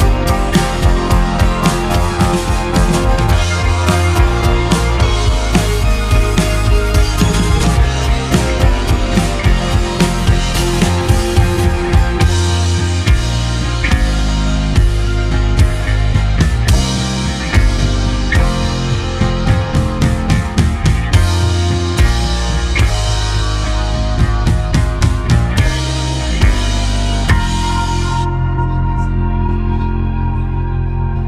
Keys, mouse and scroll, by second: 3.4 click, 4.1 click, 5.1 click, 5.9 s, 9.4 scroll down 2, 9.6-10.0 scroll up 1, 10.0 middle click, 10.9-11.6 scroll down 1, 11.6 Tab, 13.2-14.9 middle drag, 14.9 click, 15.4 click, 15.9-17.4 right drag, 17.4-18.8 middle drag, 18.8 click, 19.5 click, 21.5-26.8 drag, 28.2-31.2 drag.